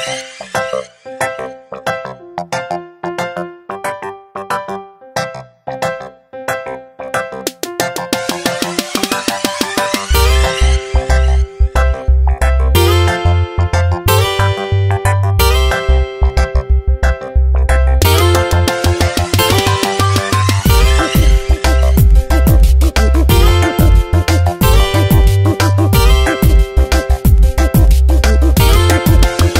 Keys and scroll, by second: 6.0 ctrl+t, 11.8 Return, 13.7 ctrl+t, 17.4 Return, 20.7 ctrl+z, 21.8 ctrl+z, 24.3 ctrl+t, 27.0 Return, 28.9 space.